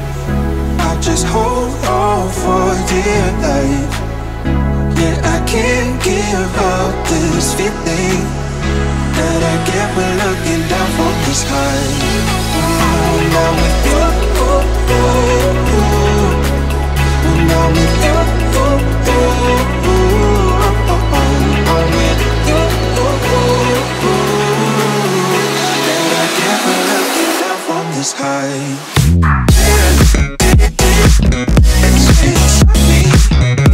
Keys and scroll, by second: 31.5 ].